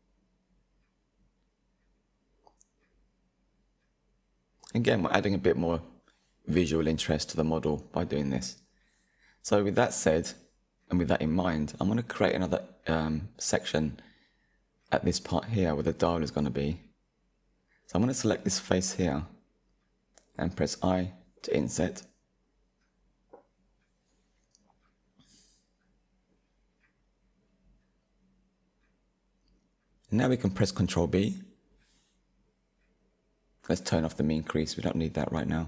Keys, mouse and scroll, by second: 0.2 click, 0.9-4.5 shift+middle drag, 6.5 KP_1, 7.5-9.6 middle drag, 9.6 click, 10.6 Tab, 11.1 shift+middle click, 11.7-12.3 scroll up 2, 12.4-17.9 shift+middle drag, 17.9 click, 20.9 i, 27.0-30.0 middle drag, 31.6-32.5 scroll up 1, 32.5 scroll up 1, 32.6-34.2 drag, 34.2-35.6 shift+middle drag.